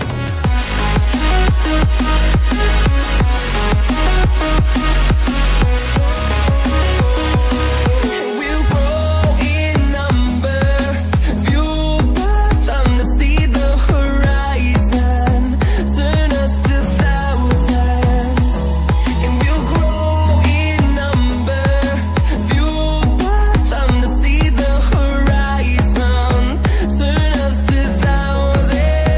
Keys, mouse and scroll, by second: 1.1 click, 3.3 double click, 4.0 click, 6.6 scroll down 1, 7.9 ctrl+c, 8.0 ctrl+v, 8.9 click, 10.5 ctrl+c, 10.7 ctrl+v, 11.5 click, 22.6 scroll down 1, 23.6 click, 24.3 ctrl+c, 24.5 ctrl+v, 25.3 click, 29.0 click.